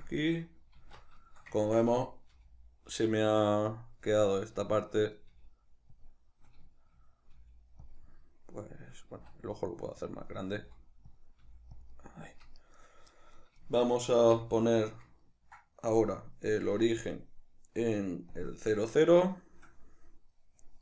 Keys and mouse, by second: 0.1 click, 0.8 alt+q, 1.3-3.9 shift+middle drag, 2.3 g, 3.9 click, 4.0-6.1 middle drag, 5.3 g, 6.1 click, 6.3-7.9 middle drag, 7.4 g, 7.9 click, 8.0-10.2 middle drag, 9.2 s, 10.2 click, 10.6 s, 11.2 click, 11.4 g, 11.8 click, 11.9-12.6 middle drag, 12.6 right click, 13.2-16.0 middle drag, 14.2 shift+c, 16.0 right click, 17.0-18.9 drag, 18.9-20.8 ctrl+middle drag.